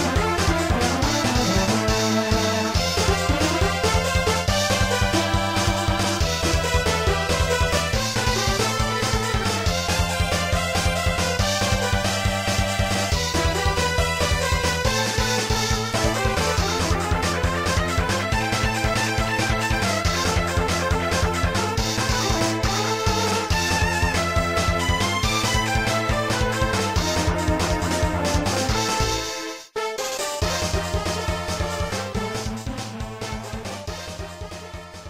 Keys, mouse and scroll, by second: 6.8 scroll down 1, 9.0 s, 10.3 click, 10.6 ctrl+z, 12.7 click, 13.7 click, 14.3-15.0 typing, 16.7 scroll down 1, 17.9 scroll up 1, 22.6 click, 23.9 click, 24.6-25.2 typing, 26.7 click, 27.1 ctrl+z, 28.3 click, 29.1 click, 30.0-30.4 typing, 31.3 scroll down 1.